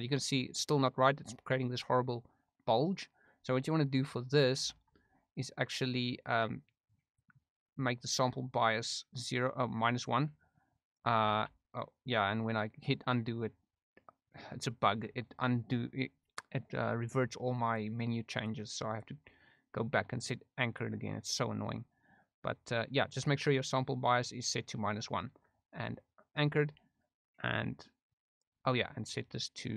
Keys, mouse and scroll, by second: 0.1 middle click, 5.5 ctrl+z, 7.0 click, 8.9 middle click, 10.3 click, 12.2 ctrl+z, 17.8 click, 18.9-20.8 drag, 23.9 click, 27.3-28.4 drag, 29.0-29.7 drag.